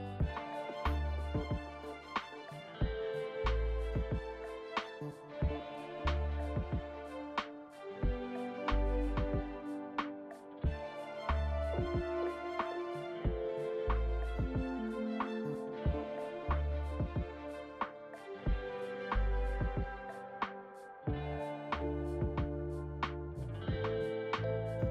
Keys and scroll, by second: 8.6 `, 14.9 f, 15.3 Return, 21.9 ctrl+z.